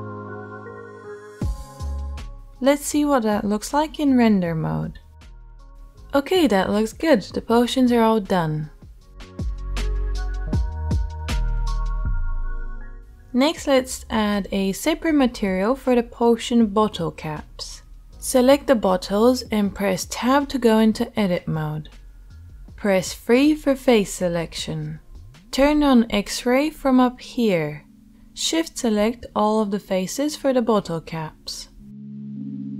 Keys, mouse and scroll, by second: 0.0 alt+h, 13.3-20.7 drag, 19.0 Tab, 20.7-30.6 shift+middle drag, 23.0 KP_3.